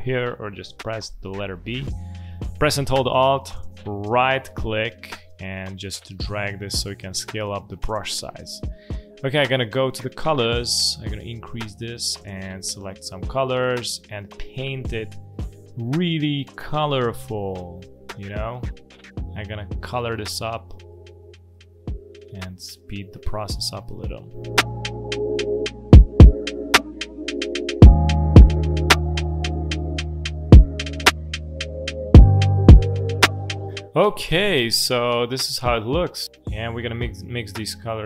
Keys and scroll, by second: 0.9 b.